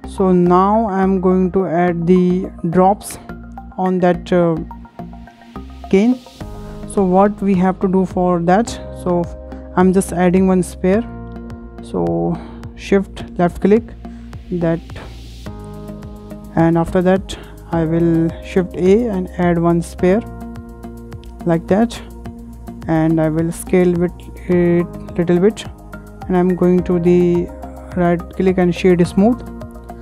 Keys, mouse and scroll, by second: 0.9-2.0 shift+middle drag, 2.0-2.4 scroll up 5, 3.1 scroll down 3, 3.7-5.2 shift+middle drag, 5.2 click, 5.5-5.9 scroll up 6, 5.9 shift+middle click, 6.6 scroll up 1, 6.8-7.2 shift+middle drag, 7.2-7.6 scroll down 4, 7.6-8.7 middle drag, 8.7 scroll up 1, 9.0-10.2 shift+middle drag, 10.2-11.1 scroll down 3, 13.5 shift+right click, 14.2 scroll up 4, 14.6 shift+middle click, 15.0 scroll up 1, 18.0 shift+a, 18.1 shift+a, 21.0-21.3 scroll up 2, 21.3-23.5 shift+middle drag, 23.3 s, 23.5 s, 25.3-26.8 scroll up 9, 25.7 shift+middle click, 26.8 shift+middle click, 27.3-30.0 shift+right drag.